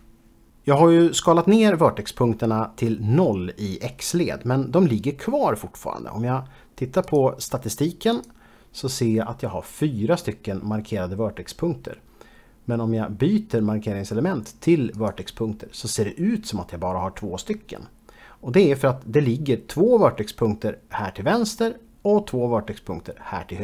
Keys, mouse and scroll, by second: 7.2 click, 8.7 click, 15.1 click.